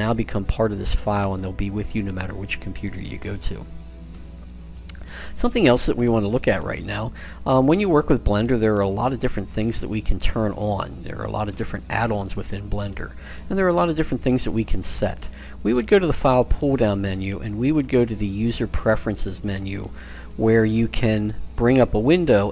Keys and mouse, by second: 7.2-8.5 middle drag, 8.8 middle click, 15.4-17.3 drag.